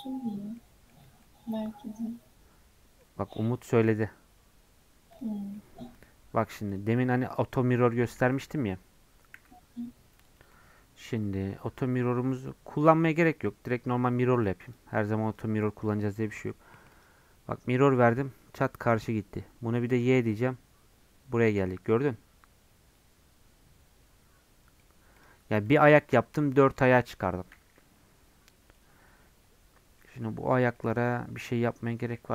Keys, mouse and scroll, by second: 5.3 scroll down 1, 5.5-6.7 middle drag, 6.7 click, 7.1-9.3 middle drag, 9.3 n, 12.8-17.0 middle drag, 17.0 click, 17.4-19.9 middle drag, 19.9 click, 20.3-24.2 middle drag, 25.1-26.7 drag, 26.7-30.2 middle drag, 30.2-30.7 scroll up 4, 30.7 middle click, 31.1 Tab, 31.6 middle click.